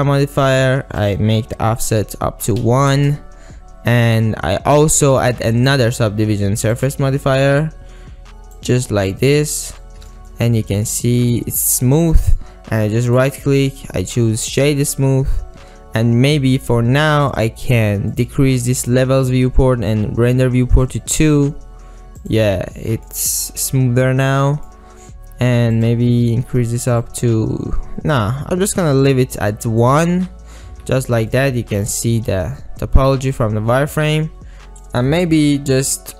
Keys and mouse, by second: 1.1-3.0 drag, 5.8 drag, 6.9-9.3 drag, 9.9 click, 10.4 ctrl+middle click, 10.9 click, 11.2 click, 12.2 click, 13.1-14.9 drag, 18.2 drag, 22.3 click, 22.8 middle click, 23.4 click, 24.4 click, 25.8 click, 30.7 z, 31.4-32.0 drag, 32.3 alt+z, 32.7-33.5 middle drag, 34.0-34.7 middle drag, 34.8-36.1 drag.